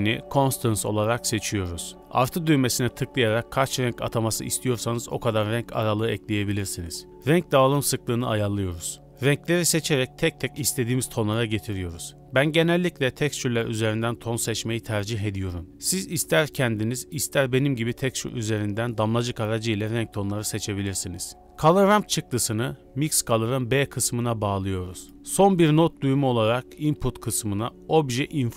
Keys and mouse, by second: 0.1-0.7 drag, 2.1-2.4 drag, 2.9-3.3 drag, 3.8-4.1 drag, 4.5 click, 5.7 click, 6.4 click, 7.1 click, 8.2 click, 9.1 click, 9.5 click, 15.4 click, 16.0 click, 19.8 click, 20.3 click, 20.9-21.4 drag, 21.4 middle click, 23.9 shift+a.